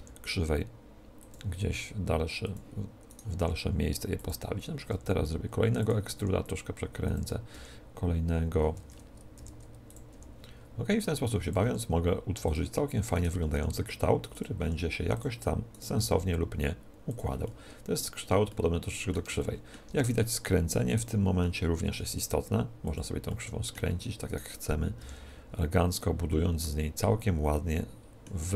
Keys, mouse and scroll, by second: 1.2-8.9 drag, 1.8 s, 3.0-4.8 right drag, 3.4 r, 4.8 e, 6.2 r, 7.5 r, 9.3 e, 9.8-13.6 drag, 10.0 r, 11.8 s, 13.0 right click, 13.3 r, 14.2 click, 14.6 s, 15.0 click, 15.6-16.9 middle drag, 15.9 g, 16.9 click, 17.0 right click, 17.1-21.2 middle drag, 17.4-18.9 drag, 20.8-22.6 right drag, 21.8 ctrl+t, 22.9-24.7 drag, 23.2-24.2 middle drag, 24.2-26.0 right drag, 25.0 ctrl+t, 26.0-27.8 drag, 26.2 ctrl+t, 27.6-28.5 middle drag.